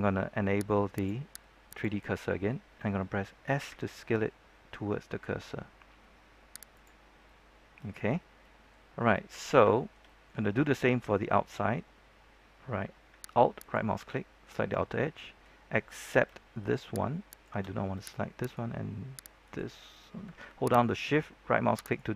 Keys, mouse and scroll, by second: 3.6 s, 6.7 click, 7.2 middle click, 8.2 scroll down 1, 8.3 middle click, 8.8-9.1 scroll up 1, 9.1 middle click, 9.7-12.6 shift+middle drag, 13.5 alt+right click, 14.0 middle click, 17.2 shift+right click, 18.3 shift+right click, 19.4 shift+right click, 19.8-20.2 scroll up 2, 21.8 shift+right click.